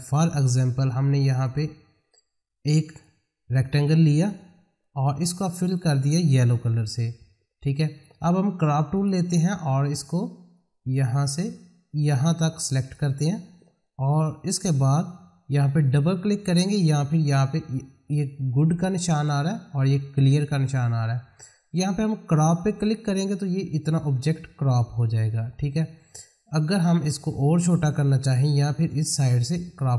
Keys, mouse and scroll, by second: 1.4-6.1 drag, 6.2 click, 8.9-15.2 drag, 22.8 click, 28.9-29.9 drag.